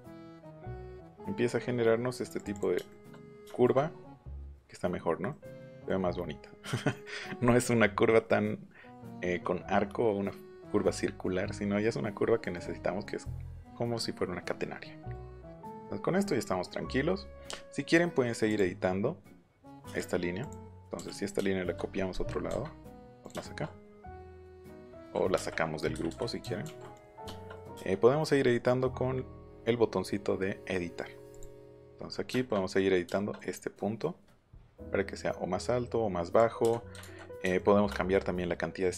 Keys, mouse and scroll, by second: 2.3 click, 2.5 click, 2.9 shift+middle click, 12.2 middle click, 15.1 middle click, 15.6 middle click, 16.7 middle click, 17.1 middle click, 17.4 middle click, 18.4 click, 19.4 shift+middle click, 20.4 click, 20.7 middle click, 21.1 click, 23.2 click, 25.3 space, 26.9 click, 31.3 click, 32.2 shift+middle click, 33.0 shift+middle click, 34.6-36.3 drag, 36.6 space, 37.0 ctrl+z, 37.5 shift+middle click.